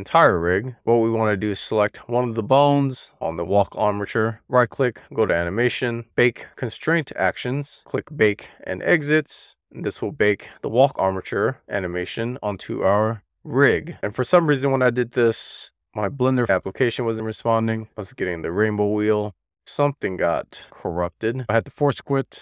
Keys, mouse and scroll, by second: 1.4-1.9 scroll up 3, 1.5 shift+middle click, 1.9 middle click, 2.0-3.3 scroll down 1, 4.2 click, 6.1-22.4 right drag.